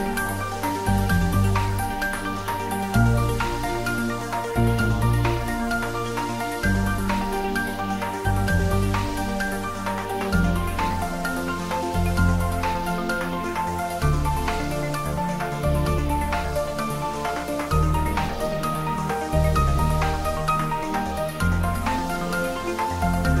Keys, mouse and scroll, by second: 1.9-8.5 drag, 8.5 middle click, 9.1 click, 10.2 g, 10.6-15.6 drag, 15.6-21.5 drag, 21.5 ctrl+middle click, 21.9-23.4 shift+middle drag.